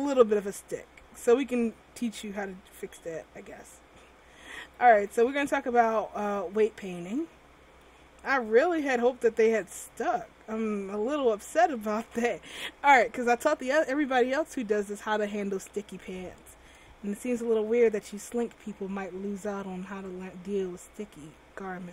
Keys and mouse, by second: 0.1 middle click, 4.9 a, 5.2 a, 5.5 alt+r.